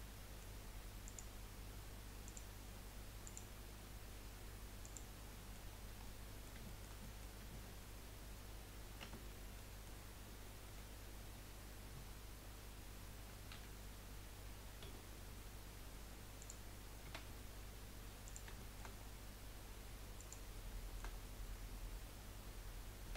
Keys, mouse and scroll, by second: 1.0-2.3 drag, 3.2-5.3 drag, 5.3 middle click, 5.7-6.0 scroll down 4, 6.0 middle click, 6.6-7.0 shift+scroll up 1, 7.0 middle click, 7.5 Tab, 9.0 Tab, 9.5-10.6 middle drag, 10.6 KP_1, 13.5 g, 17.0 s, 18.5 shift+middle click, 18.9-20.2 scroll up 4, 20.2 click, 20.8 shift+middle click, 21.2-22.8 scroll up 5, 23.0 s.